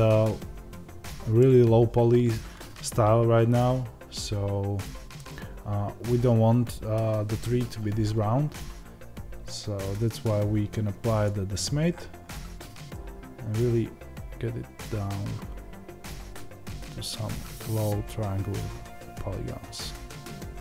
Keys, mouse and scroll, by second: 11.2-20.6 drag.